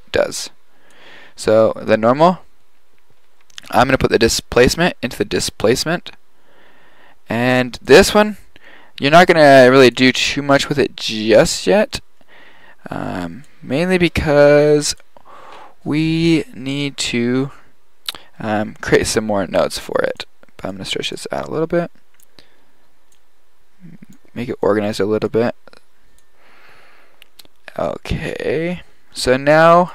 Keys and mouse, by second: 3.6-5.6 drag, 5.9-6.6 drag, 7.6-9.6 drag, 17.0-19.1 drag, 19.8-22.2 drag, 24.0 click, 25.2-27.2 drag, 29.8 click.